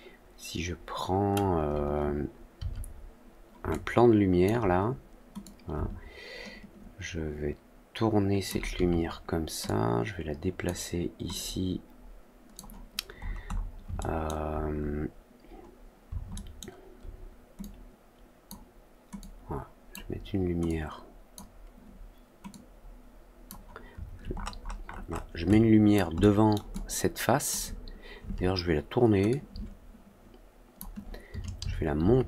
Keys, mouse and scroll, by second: 3.6-4.4 alt+drag, 5.3-8.4 drag, 9.6-10.6 drag, 11.3-12.5 drag, 13.1 middle click, 13.4 middle click, 13.9-14.2 alt+scroll up 2, 14.4 alt+scroll down 2, 16.3 alt+scroll up 2, 17.5-18.4 drag, 19.1-19.8 drag, 20.6 click, 22.4 click, 24.3 middle click, 24.3-25.2 scroll up 4, 24.6 middle click, 24.8 middle click, 25.1 middle click, 25.4-25.9 alt+drag, 26.1-26.5 alt+middle drag, 26.6-27.4 alt+drag, 29.2-30.7 shift+drag.